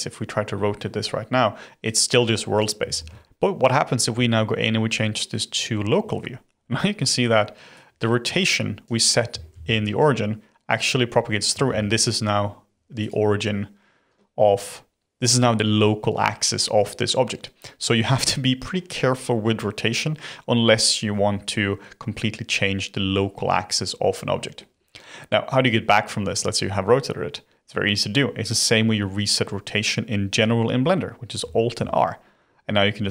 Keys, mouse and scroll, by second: 0.5-1.8 middle drag, 1.8 click, 3.0 ctrl+z, 3.2 ., 4.1 ,, 6.1-7.7 middle drag, 7.7 click, 9.5 ctrl+z, 10.8 click, 11.6 ctrl+z, 13.0 click, 23.1-26.1 middle drag, 31.7 alt+r.